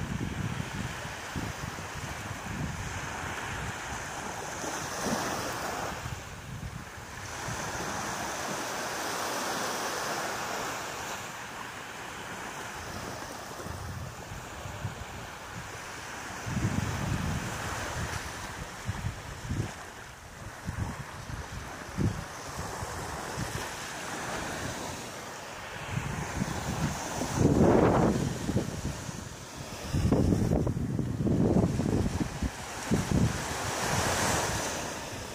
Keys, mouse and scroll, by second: 0.4 shift+middle click, 1.9 right click, 2.3 shift+right click, 2.7 right click, 3.1 shift+right click, 3.4 shift+right click, 3.8 shift+right click, 4.5 x, 5.4 middle click, 6.3 shift+middle click, 7.3 middle click, 8.9 z, 9.7 z, 10.9 alt+right click, 12.4 b, 15.6 shift+right click, 15.9 shift+right click, 16.3 shift+right click, 16.7 shift+right click, 17.0 shift+right click, 17.2 shift+right click, 18.0 shift+right click, 18.4 shift+middle click, 18.8 shift+right click, 19.4 middle click, 20.4 scroll down 3, 20.9 scroll up 1, 21.1 middle click, 21.7 scroll down 1, 22.8 b, 25.0 middle click, 27.1 shift+right click, 27.6 shift+right click, 28.1-29.0 scroll up 1, 29.0 shift+right click, 29.0 scroll up 1, 29.8 shift+right click, 30.3 shift+right click, 31.0 shift+right click, 31.4 shift+right click, 31.9 shift+middle click, 32.7-33.0 scroll up 3, 33.5 middle click.